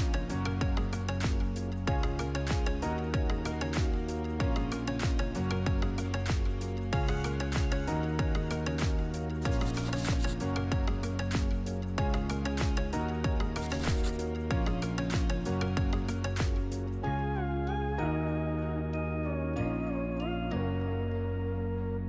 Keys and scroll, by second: 8.3 Delete, 10.0 Delete.